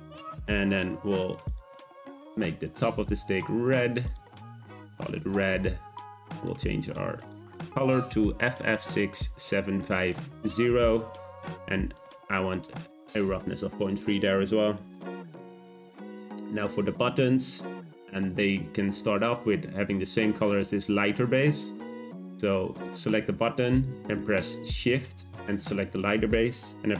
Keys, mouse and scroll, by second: 2.8 click, 3.7 click, 4.0-6.1 drag, 6.3 click, 14.0-17.0 drag, 18.1 click, 25.5 shift+click.